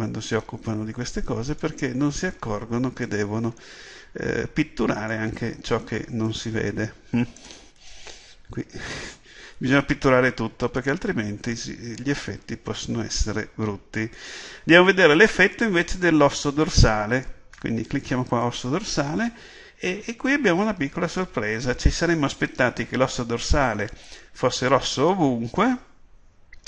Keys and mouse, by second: 1.4 middle click, 2.2-8.7 drag, 8.7 KP_7, 18.5-26.6 drag.